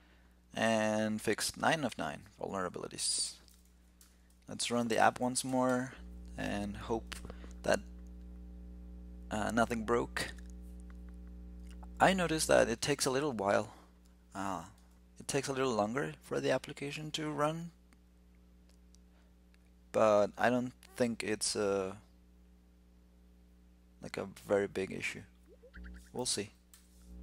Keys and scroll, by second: 3.8 ctrl+l, 4.7 shift+super+t, 26.6 alt+super+i.